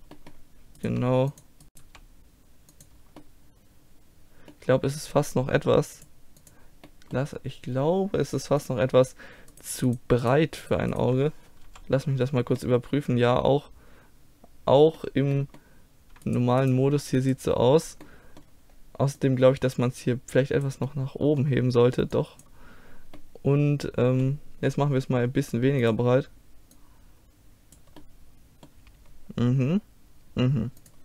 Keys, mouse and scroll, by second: 0.9 right click, 0.9 g, 1.4 click, 1.7 right click, 1.8 g, 2.3 click, 3.1-5.6 middle drag, 6.0-7.9 drag, 7.9 middle click, 8.6-11.7 drag, 9.5-11.7 right drag, 11.7 KP_5, 12.4-14.3 middle drag, 16.2-19.2 middle drag, 19.2-21.1 drag, 21.1-22.1 middle drag, 22.1-23.9 drag, 23.9 middle click, 25.8-28.0 drag, 28.0 middle click, 30.8-31.0 drag.